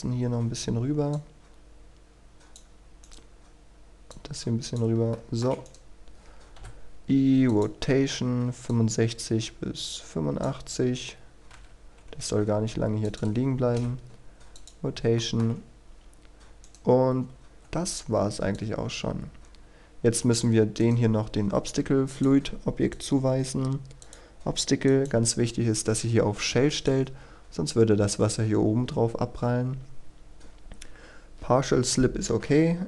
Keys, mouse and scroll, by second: 3.0-4.0 right drag, 4.1 click, 5.1 shift+middle click, 5.7 right click, 7.5-11.0 drag, 13.0 ctrl+click, 14.5 click, 15.1 shift+middle click, 16.6 right click, 17.0-17.5 scroll down 1, 17.5-18.5 scroll up 1, 18.5-20.8 drag, 20.8 right click, 22.1-24.9 drag.